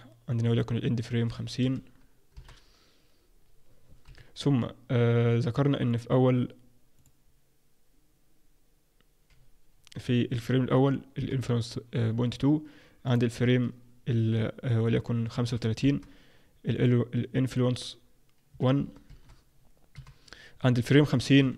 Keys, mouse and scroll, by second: 4.0 Home, 5.9 click, 6.9 click, 13.0 click, 16.7 click, 20.9 click.